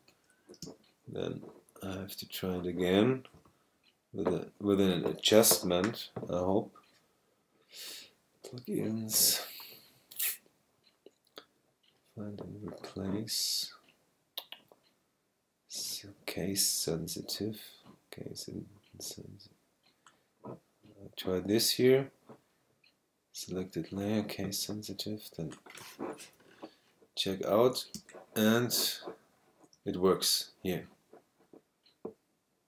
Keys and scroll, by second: 0.6 super+space, 1.3 space, 27.9 space.